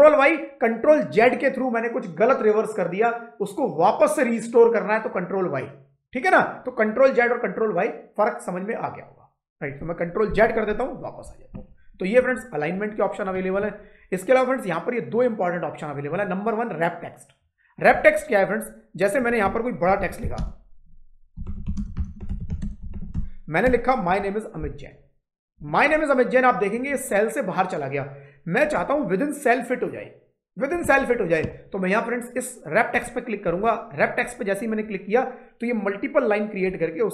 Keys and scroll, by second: 10.1 ctrl+z, 19.6-23.5 typing, 23.5 Return, 23.9 Up.